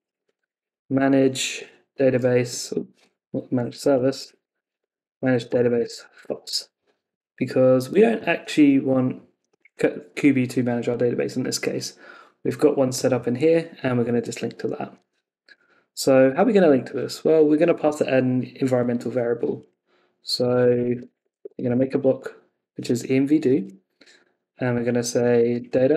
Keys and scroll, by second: 1.6 Tab, 2.5 Escape, 3.0 Left, 6.2 Escape, 6.4 super+s, 14.1 super+Tab, 15.1 ↺.